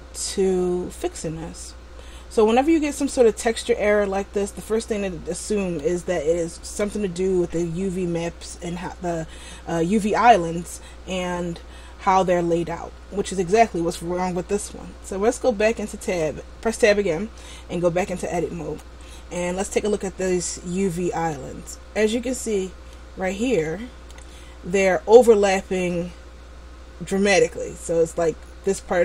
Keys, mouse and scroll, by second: 3.0 middle click, 16.2 Tab, 18.7 a, 19.4 a, 20.5-21.6 scroll down 5, 21.6 middle click, 22.3-22.7 scroll up 3, 23.1 middle click, 23.1-23.9 scroll up 2, 23.9 middle click.